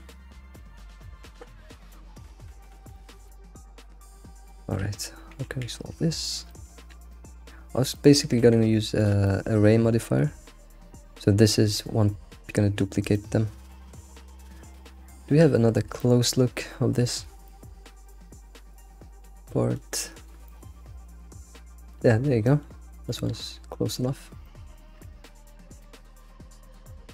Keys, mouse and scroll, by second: 0.8 alt+middle click, 1.0 alt+middle click, 1.9 alt+middle click, 2.3 s, 3.0 shift+middle click, 3.3 scroll up 3, 3.4 alt+x, 4.0 g, 4.5-5.0 shift+middle drag, 5.5 s, 6.5 shift+middle click, 7.6-8.0 scroll up 3, 8.0-8.4 shift+middle drag, 8.4 g, 9.3-9.7 shift+middle drag, 9.7 scroll up 2, 10.1-14.0 shift+middle drag, 14.0-16.0 scroll down 20, 15.1 shift+middle click, 16.0-20.0 shift+middle drag, 20.0-20.5 scroll down 7, 20.5-22.1 shift+middle drag, 22.1-23.8 scroll up 11, 22.5 shift+middle click, 23.1 shift+middle click, 23.8-24.1 shift+middle drag, 24.1-25.2 scroll up 6, 24.5 shift+middle drag, 25.3-27.1 shift+middle drag.